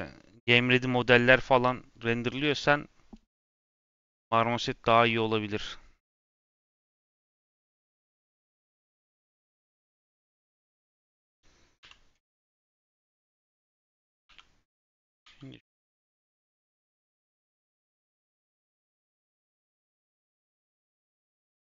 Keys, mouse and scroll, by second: 5.5-7.1 drag, 7.1 z, 7.7 click, 8.2 middle click, 8.6 scroll up 2, 8.9 scroll down 2, 9.1 middle click, 10.0 click, 10.7 click, 11.7 /, 12.2 Tab, 12.8 click, 13.5 click, 14.2 3, 16.6 click, 17.6 x, 19.3-20.9 middle drag, 20.9-21.4 scroll down 1, 21.4 ctrl+z.